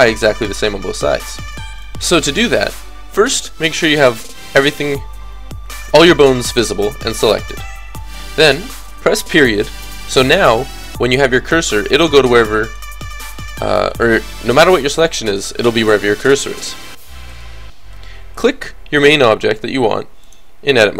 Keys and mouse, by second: 1.5-5.1 drag, 11.9 click, 12.6-17.0 middle drag, 17.3 click, 19.3 click, 19.3 right click, 19.7 click, 19.7 right click, 19.9-20.9 drag, 19.9 right click.